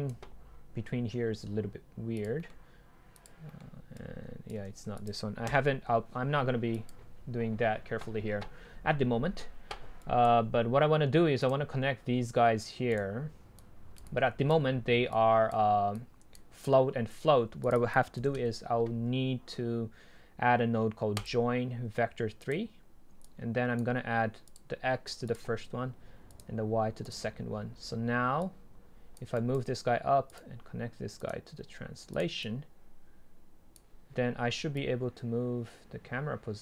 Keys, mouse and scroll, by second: 0.1-2.5 drag, 2.5-3.3 middle drag, 3.3-3.7 drag, 3.7 middle click, 3.9 click, 4.6 ctrl+z, 5.5 Delete, 6.8-9.0 drag, 10.1-11.5 right drag, 11.5-13.0 drag, 13.0-13.6 right drag, 13.6 drag, 14.4 click, 29.3-30.3 right drag, 30.3-33.1 drag, 35.7 click.